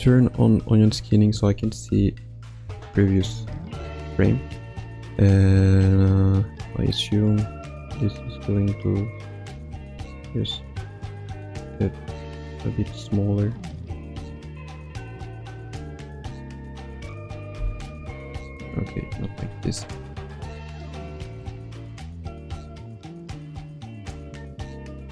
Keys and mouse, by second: 2.1 shift+middle click, 3.7 alt+shift+middle click, 7.2-16.7 drag, 17.6 Left, 17.9 Right, 18.6 ctrl+z, 19.0 ctrl+z, 20.2-25.1 drag.